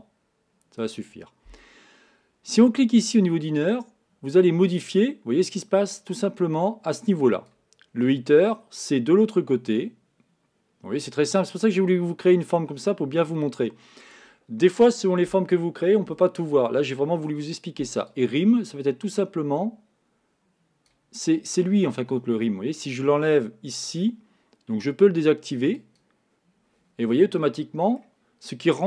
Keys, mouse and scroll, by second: 3.2-6.3 drag, 8.1-11.1 drag, 18.2-21.2 drag, 25.8 click, 27.2-28.8 middle drag.